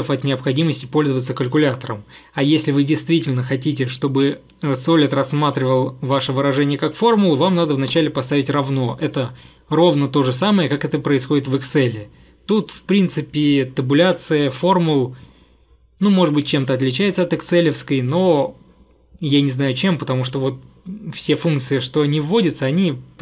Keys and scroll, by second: 8.0 =.